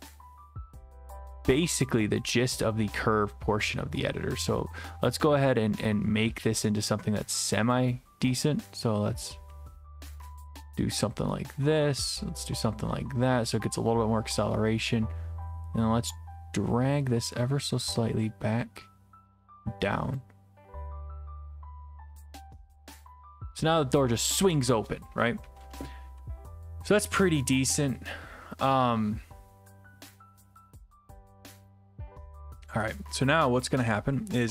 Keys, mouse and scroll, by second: 7.5 click, 20.1 click.